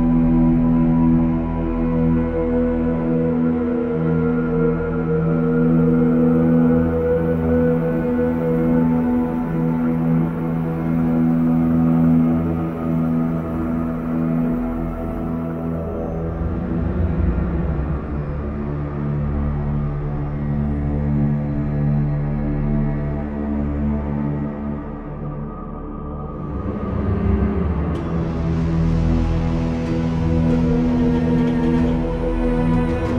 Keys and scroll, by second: 0.9 b, 2.5 x, 4.6 typing, 10.9 v, 14.2 b, 15.2 ctrl+b, 15.3 ctrl+z, 20.0 b, 20.9 shift+b, 25.4 v, 28.8 ctrl+d, 29.3 ctrl+i, 29.5 b, 30.6 ctrl+z.